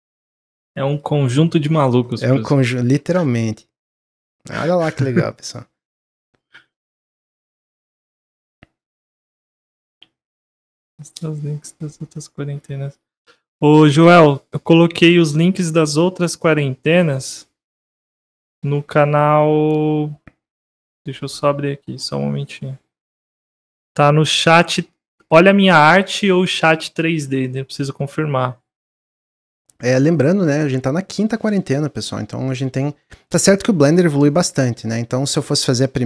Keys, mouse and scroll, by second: 0.1 click, 0.4 s, 1.8-2.5 middle drag, 2.5 click, 4.0 middle click, 4.2 click, 4.5 scroll down 3, 4.8-5.7 middle drag, 5.7 scroll up 3, 6.0-6.7 scroll down 5, 6.7-11.4 middle drag, 12.1 click.